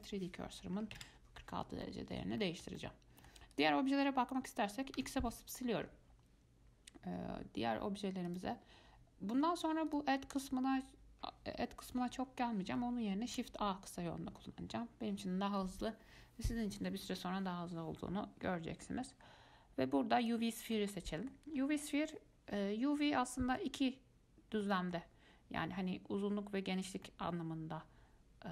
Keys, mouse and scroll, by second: 2.1-3.7 middle drag, 3.7 click, 5.2 x, 8.5-10.2 drag, 13.5 shift+a, 21.0-21.8 middle drag, 21.8 scroll up 4, 22.1-28.5 middle drag.